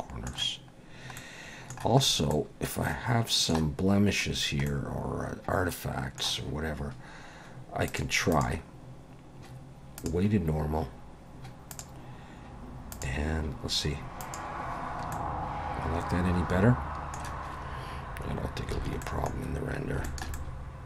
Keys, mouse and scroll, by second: 0.8-1.2 scroll down 1, 1.2 middle click, 2.0 scroll up 3, 2.3 middle click, 4.3-4.7 scroll down 2, 4.7 middle click, 8.3 click, 11.7 click, 12.9 click, 14.2 click, 15.1 middle click, 18.2-18.7 scroll down 3, 18.8 alt+a, 19.0 middle click, 19.4-19.7 scroll down 3, 20.0 shift+middle click, 20.3 middle click.